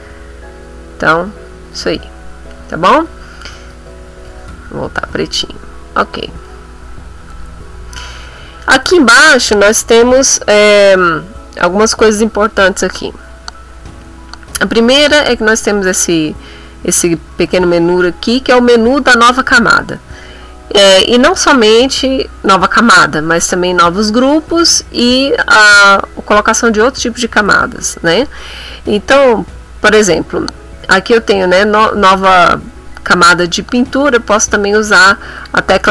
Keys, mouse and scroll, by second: 2.8 middle click, 3.6 ctrl+z, 5.3 middle click, 6.0 click, 6.8 middle click, 7.3 click, 15.5 click, 17.0 click, 17.8 click, 35.4 click.